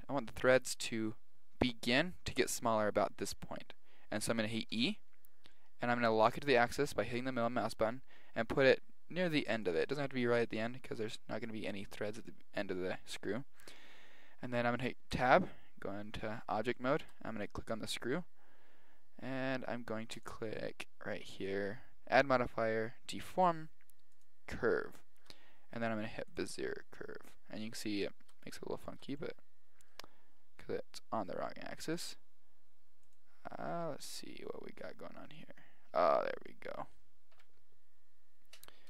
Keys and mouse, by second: 4.7 e, 15.1 Tab, 16.8-17.4 middle drag, 17.4-19.2 right drag, 20.2-21.9 drag, 25.7 click, 28.0-31.9 middle drag, 32.0-35.0 drag, 35.6-38.4 middle drag.